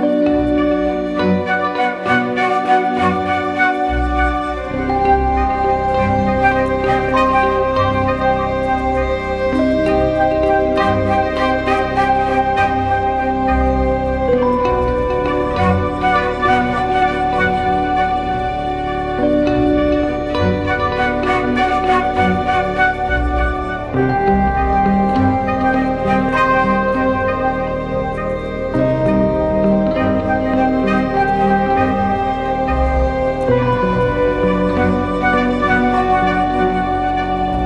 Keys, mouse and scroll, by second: 17.7 right click, 18.9 double click, 25.4-25.9 typing, 26.2 double click, 33.3 right click, 34.7 double click.